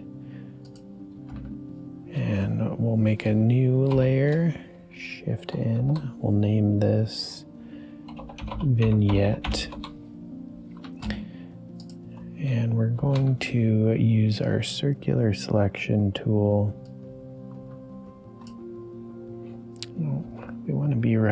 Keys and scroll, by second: 3.9 shift+n, 5.7 shift+p, 7.8-9.9 typing, 12.9 shift+m, 20.2 ctrl+d.